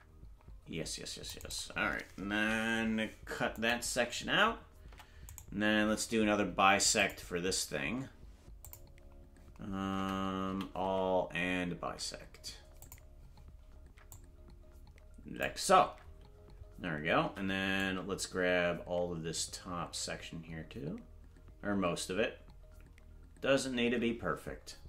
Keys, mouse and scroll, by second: 7.0 Tab, 7.0 click, 7.0 right click, 8.6 click, 10.0 Tab, 10.5 a, 12.8 click, 14.1 click, 17.2 c.